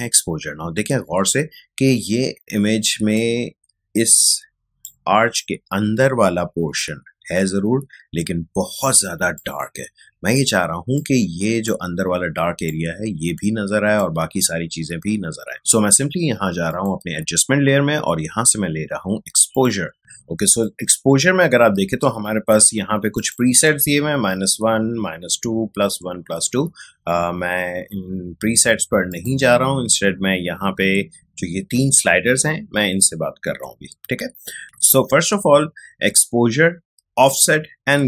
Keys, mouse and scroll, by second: 0.9 ctrl+space, 1.2-9.3 ctrl+drag, 9.3-15.7 ctrl+drag, 16.7 click, 19.5-23.1 drag, 29.1 click.